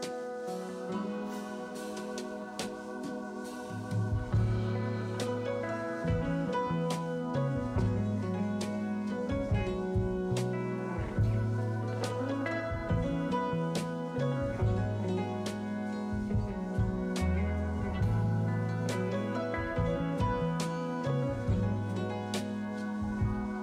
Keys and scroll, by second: 5.5 s, 12.6 s, 14.3 s, 16.8 s, 17.4 s, 20.9 s, 21.9 s, 23.5 s.